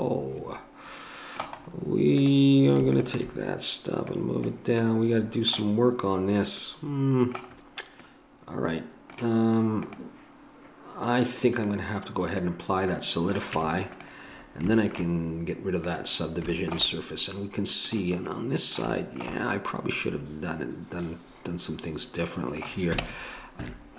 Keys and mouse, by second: 2.2-7.6 drag, 7.6-9.9 middle drag, 9.9-13.0 drag, 13.0 middle click, 13.5 Tab, 15.9-17.7 middle drag, 19.0-22.0 middle drag, 23.0 ctrl+Tab, 23.6 ctrl+z.